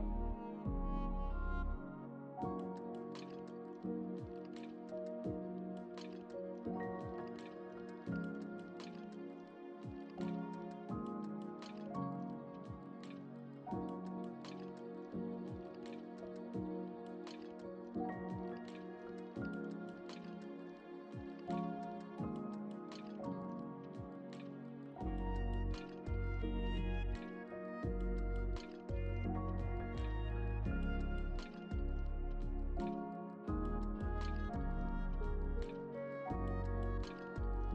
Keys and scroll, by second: 4.8 Return, 34.4 space.